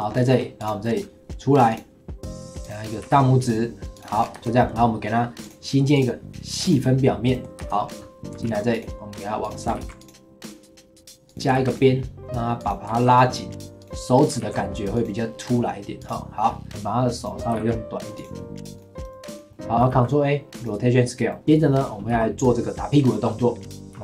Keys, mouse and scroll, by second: 0.1 scroll up 2, 0.3 middle click, 0.6 click, 0.8 middle click, 1.7 click, 2.6 click, 3.0 e, 4.1 scroll down 3, 4.3 Tab, 4.6 middle click, 5.4 click, 6.7 click, 7.3 middle drag, 7.6 Tab, 7.8-8.4 scroll up 1, 8.4 ctrl+r, 9.7 ctrl+r, 11.5 ctrl+r, 12.9 ctrl+r, 14.4 ctrl+r, 16.6 click, 17.5 g, 18.3-18.7 middle drag, 18.7 click, 19.0-19.5 right drag, 19.5-19.9 middle drag, 19.9 ctrl+a, 21.3 middle click, 22.1 KP_1, 23.9 g.